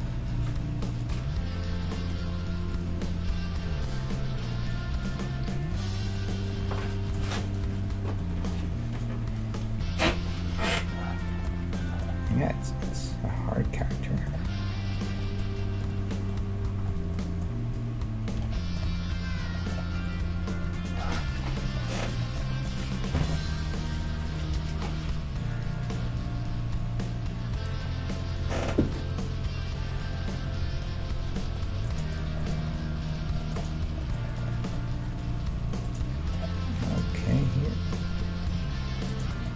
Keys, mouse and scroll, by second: 1.0-9.9 right drag, 1.2 g, 3.7 g, 5.2 g, 6.6 g, 8.5 g, 10.2-12.0 right drag, 10.4 g, 11.3 click, 12.0 middle click, 12.9 click, 12.9-13.9 right drag, 13.7 click, 18.4 f, 18.6-21.6 middle drag, 18.6 right click, 18.9 ctrl+Tab, 20.0-23.1 right drag, 20.2 g, 21.3 g, 22.0-24.7 middle drag, 23.2-27.6 right drag, 23.4 g, 24.4 g, 25.9 g, 28.2-31.6 right drag, 28.4 g, 30.4 g, 31.6 middle click, 32.7 ctrl+Tab, 36.7-38.4 right drag, 37.0 g, 38.6 KP_3, 39.3-39.5 middle drag.